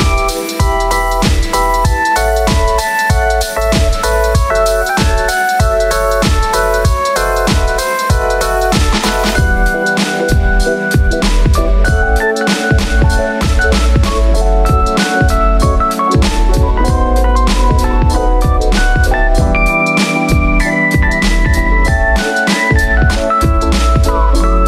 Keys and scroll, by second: 4.9 f, 14.2 f, 16.5 super+s, 16.9 Right, 17.2 BackSpace, 17.4 5, 17.5 Return.